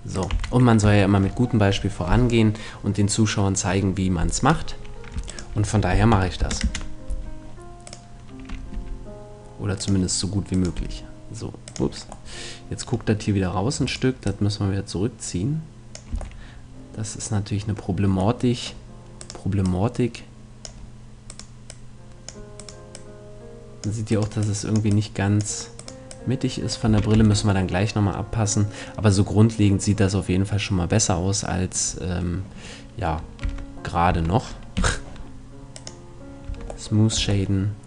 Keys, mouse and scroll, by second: 0.4-2.2 drag, 0.4 right click, 0.4 a, 1.0-2.5 middle drag, 5.3-7.1 right drag, 5.9 s, 7.8-9.6 right drag, 8.8 g, 10.4 click, 10.8 g, 12.3-13.6 middle drag, 13.9-15.8 right drag, 14.3-16.0 drag, 16.1 a, 16.4 middle click, 19.2-20.8 right drag, 19.6-20.8 drag, 19.6 middle click, 26.9 a, 27.2 Tab, 28.2-29.7 middle drag, 33.4 Tab, 34.1 Tab, 34.8 t, 35.8-36.9 drag, 36.5 Tab, 37.2 Tab.